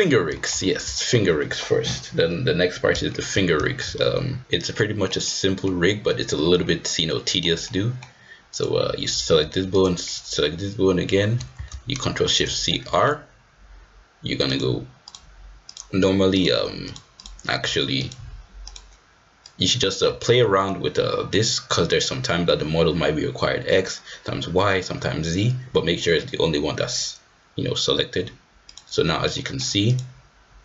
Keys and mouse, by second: 0.3 shift+middle drag, 0.9 shift+middle drag, 1.4 middle click, 3.0 shift+middle drag, 3.6 shift+middle drag, 4.7 middle click, 5.2-5.6 middle drag, 7.0-7.4 middle drag, 7.6-8.0 middle drag, 8.5-9.3 drag, 12.7 ctrl+shift+c, 14.5-15.1 drag, 15.7-16.4 drag, 16.8 click, 17.2-18.1 drag, 18.7-19.7 drag, 20.2 shift+middle click, 28.7 click, 29.3 middle click, 29.9-30.3 drag.